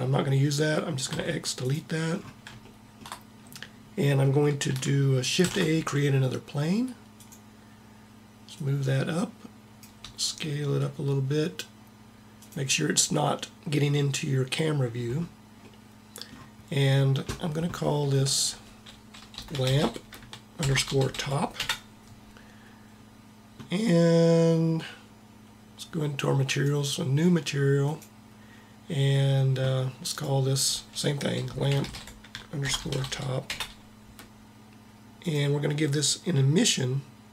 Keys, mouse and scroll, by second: 1.0 x, 5.4 shift+a, 8.5 click, 10.0 s, 10.2 click, 10.3-11.5 middle drag, 15.7-17.2 middle drag, 18.3-19.9 drag, 26.4-29.7 drag, 30.0-31.8 drag, 35.2-37.0 drag.